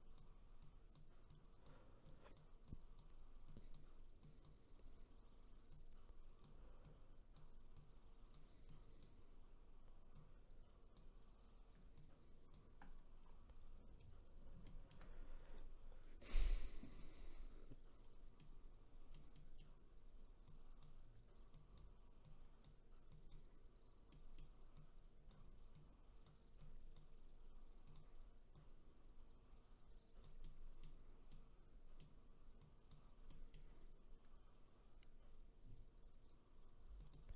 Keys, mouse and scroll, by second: 13.2-14.0 scroll down 3, 14.0-14.6 scroll up 1, 14.6 shift+middle click, 15.1-16.4 scroll up 2, 16.4-18.0 drag, 18.0-18.4 scroll down 1, 18.4-20.5 middle drag, 20.5-24.1 drag, 24.1 middle click, 24.8-30.4 drag, 30.4-32.6 middle drag, 32.6 click, 33.3-36.3 middle drag, 37.0 click.